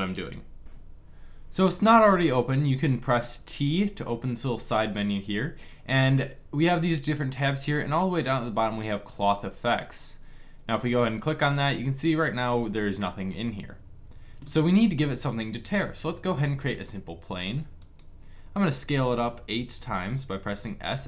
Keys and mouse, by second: 3.6 t, 16.1 shift+a, 19.1 s.